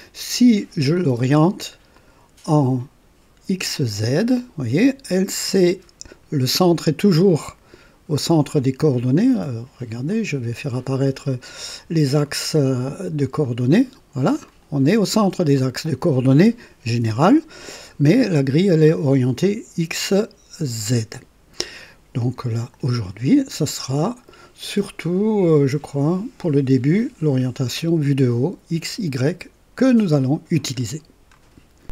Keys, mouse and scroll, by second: 1.9 click, 3.7 click, 4.8-6.3 drag, 10.0 click, 13.4 click, 14.4-16.1 drag, 24.8 click, 29.1 click.